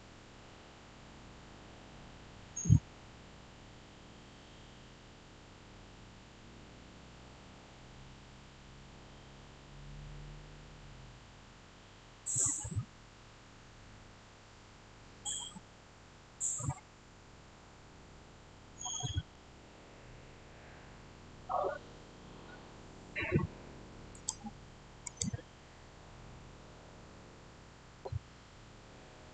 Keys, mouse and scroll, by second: 19.8-21.5 scroll up 1, 24.0 scroll up 1, 24.0 click.